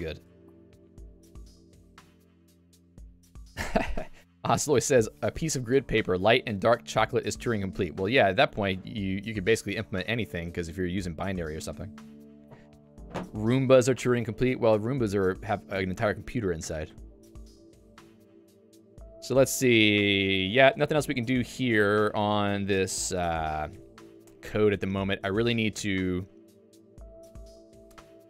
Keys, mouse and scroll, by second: 0.4 ctrl+d, 0.6 ctrl+d, 15.5 click, 15.8 Escape, 16.6 ctrl+u, 16.9 ctrl+u, 18.3 j, 21.2 ctrl+d, 21.8 ctrl+d, 25.8 ctrl+u, 28.1 k.